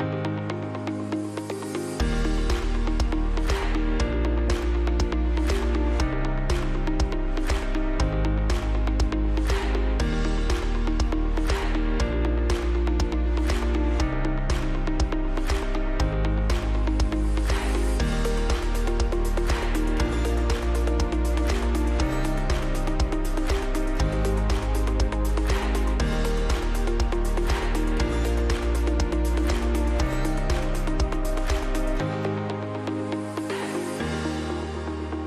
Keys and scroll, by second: 4.2 space, 6.9 Delete, 17.0 KP_Add, 20.2 ctrl+z, 20.8 F2, 23.6 F2, 27.9 F2, 30.2 F3.